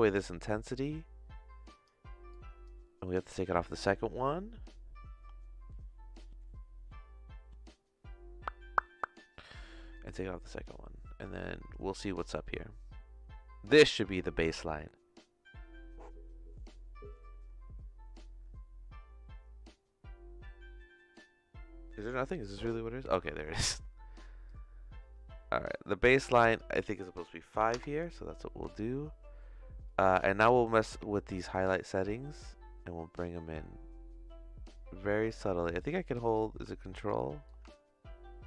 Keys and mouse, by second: 0.6-8.9 drag, 9.9 click, 24.4-26.4 drag, 26.5-28.1 drag, 28.7-29.9 shift+middle drag, 30.5 middle click, 31.5-35.2 shift+drag, 35.7 ctrl+click, 36.7 ctrl+click, 37.4-38.4 ctrl+drag.